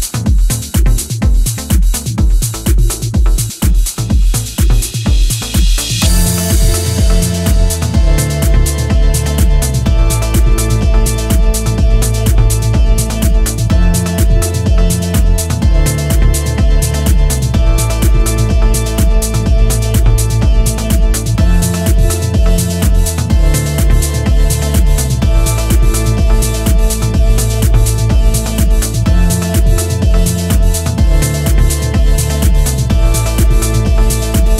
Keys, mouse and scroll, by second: 0.9 middle click, 5.7-6.6 scroll up 3, 6.6-6.9 scroll down 1, 7.2 middle click, 8.7 Tab, 10.1 shift+middle click, 11.3 middle click, 13.3 click, 15.0-16.3 scroll up 1, 21.6-22.7 scroll up 1, 22.7 scroll up 2, 24.8-25.2 scroll down 2, 25.2 middle click, 28.0 scroll up 1, 29.1-30.5 scroll up 1, 30.5 click, 31.8 click, 33.1 ctrl+z, 33.7-34.5 scroll down 5.